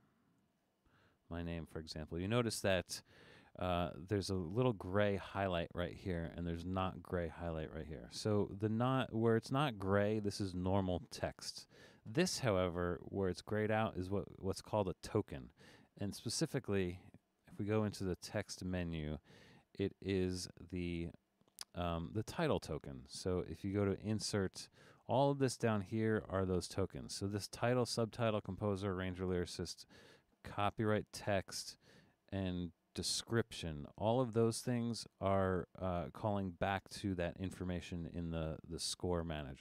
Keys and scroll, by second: 0.1-1.3 typing.